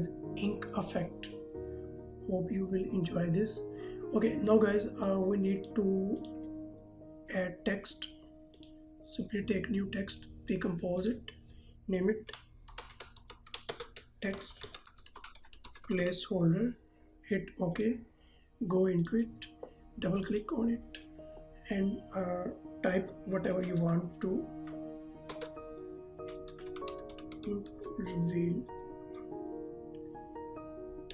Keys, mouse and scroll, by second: 5.0 click, 6.4 right click, 8.6 click, 10.1 right click, 11.0 click, 12.7-16.1 typing, 17.8 click, 23.2 shift+Num_Lock, 23.6-25.4 typing, 26.6-27.8 typing, 31.0 ctrl+Num_Lock.